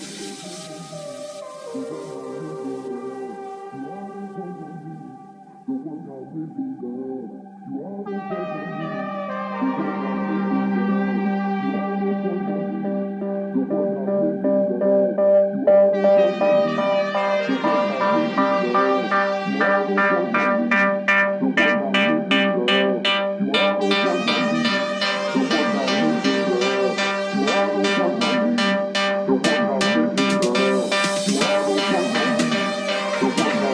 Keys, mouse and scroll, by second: 5.1-8.5 drag, 8.7 click, 9.0 click, 9.4-10.5 drag, 10.6-11.7 drag, 11.9-13.2 shift+drag, 13.4-15.9 drag, 16.3-17.6 drag, 17.9-33.7 drag.